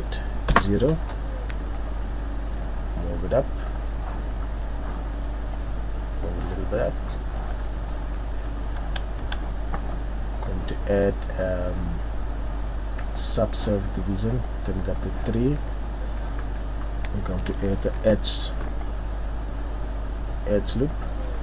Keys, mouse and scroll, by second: 2.6 click, 4.4 scroll up 2, 5.5 click, 6.5 middle click, 7.1 scroll up 3, 7.3 z, 7.4-8.3 scroll down 5, 7.9 middle click, 8.3-8.7 scroll up 3, 8.8 a, 9.2 a, 10.3 click, 15.7 scroll up 1, 16.0-16.5 scroll down 5, 16.3 middle click, 16.8 scroll up 1, 17.4-17.9 scroll up 1, 17.9 ctrl+r, 21.3-21.4 scroll up 2.